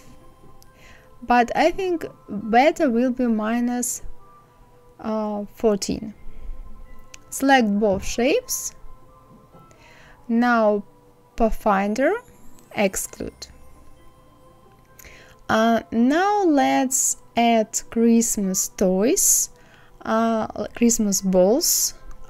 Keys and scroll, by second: 3.8 KP_4.